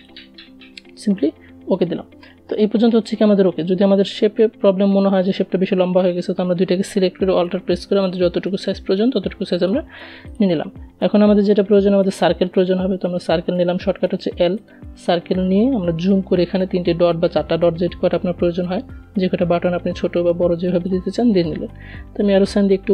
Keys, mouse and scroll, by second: 2.7-6.4 drag, 6.4-8.5 alt+drag, 10.8 right click, 12.8 click, 14.7-16.2 alt+scroll up 1, 17.2-19.6 shift+drag, 19.6 v, 20.4 Up.